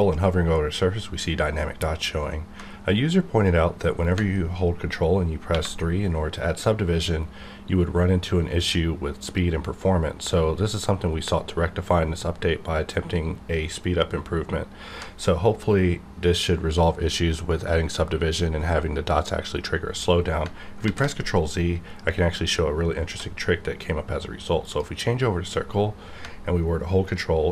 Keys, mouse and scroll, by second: 5.5 ctrl+3, 20.4 ctrl+Num_Lock, 20.8 ctrl+z, 23.0 d, 24.6 click.